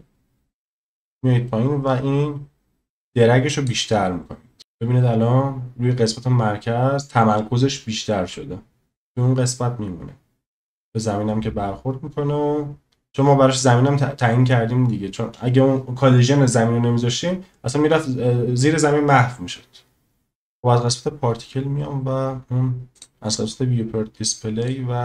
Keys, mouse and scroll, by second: 1.9-3.8 drag, 4.6 space, 22.9 click, 24.6 click.